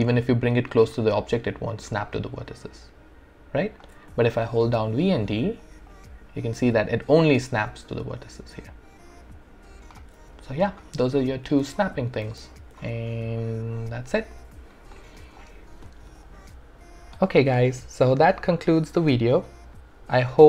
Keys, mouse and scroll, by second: 0.0-0.7 typing, 2.5 typing, 4.9-6.6 typing, 8.9-10.0 typing, 11.4 space, 13.0 alt+right click, 13.5-15.0 alt+drag, 15.0 alt+right click, 16.0 alt+right click, 16.2-20.4 alt+drag.